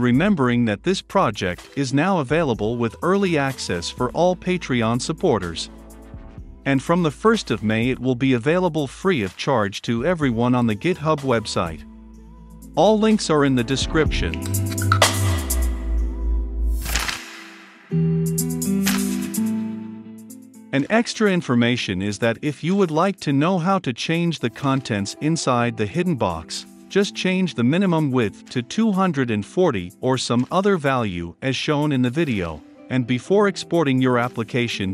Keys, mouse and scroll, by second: 8.7-11.7 middle drag, 8.7-11.7 scroll down 2, 11.7-13.5 drag, 13.8 ctrl+F5, 15.1-16.3 drag, 16.3 right click, 16.9-18.5 drag, 18.5-19.5 right drag, 19.5 click, 20.0 right click, 23.4-24.2 scroll up 1, 24.2-34.9 drag.